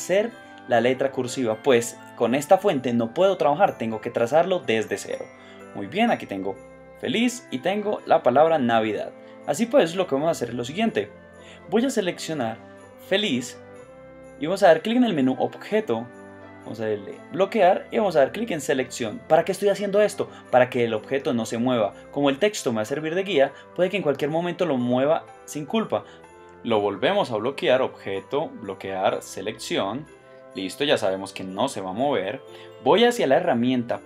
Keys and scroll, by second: 7.1 shift+space, 7.6 space, 8.5 space.